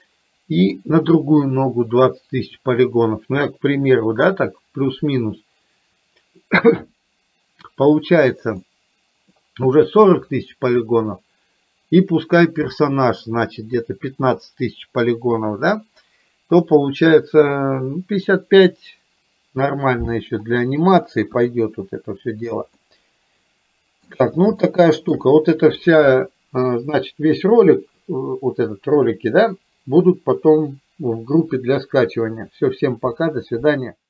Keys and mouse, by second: 0.0 middle click, 8.7 middle click, 21.4 KP_1, 22.9-24.3 middle drag, 24.7 shift+middle click.